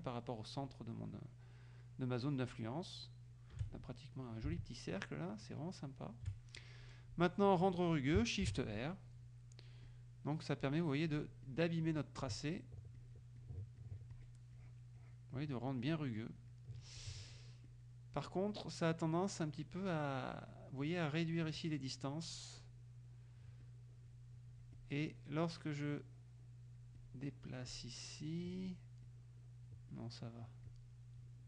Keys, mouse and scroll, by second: 4.6-6.4 shift+drag, 8.5 shift+r, 9.9 click, 11.2 click, 11.5 click, 13.0 click, 14.6 click, 16.4 click, 17.0 click, 17.7 click, 18.3-20.8 drag, 21.5 click, 22.7-23.7 drag, 24.8-28.7 drag, 29.1 click, 31.3-31.4 drag.